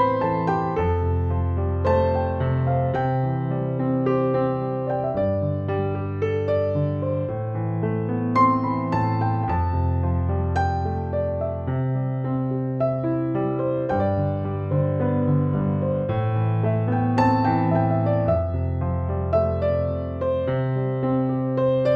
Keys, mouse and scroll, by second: 0.7 click, 2.4-3.8 typing, 4.2-4.8 click, 5.2 ctrl+z, 5.5 x, 5.8 click, 5.9 click, 7.0-7.6 drag, 8.6 space, 8.9 click, 9.1-9.5 space, 10.0 click, 11.1 space, 11.4 click, 11.6-12.1 space, 12.2 ctrl+=, 12.7 [, 13.2-14.1 click, 14.9 ctrl+-, 15.7 ctrl+-, 16.7 ctrl+=, 18.5 space, 18.7 click, 19.0-19.3 space, 19.6 ctrl+=, 20.4-21.0 [, 21.6 space, 21.7-21.9 click.